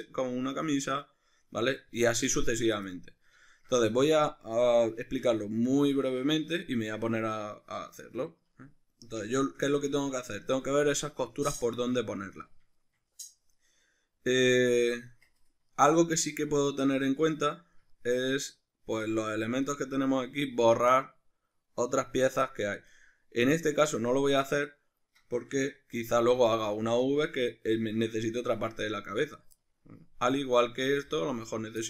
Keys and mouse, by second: 15.1 Tab, 19.6 right click, 21.0 middle click, 26.2 g, 27.2 right click, 29.8-30.6 shift+middle drag, 30.6 right click, 30.9 g, 31.6 right click.